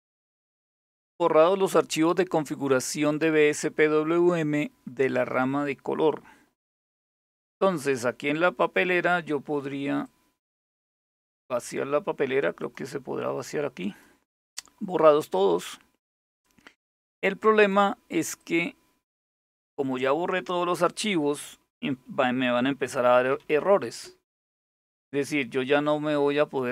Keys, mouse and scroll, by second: 0.7-3.2 scroll down 1, 3.2-5.1 scroll down 2, 5.1-5.7 scroll down 1, 5.7-8.2 scroll up 2, 8.2 click, 9.7-10.4 drag, 10.9 click, 12.2 click, 13.4 click, 15.8 click, 17.2 click, 22.5-23.7 typing, 26.0 click.